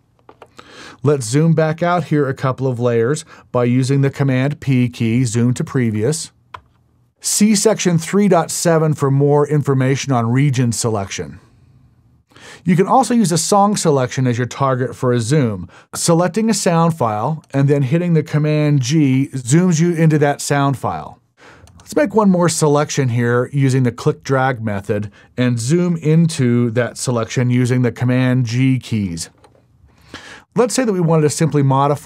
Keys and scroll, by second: 29.3 super+g.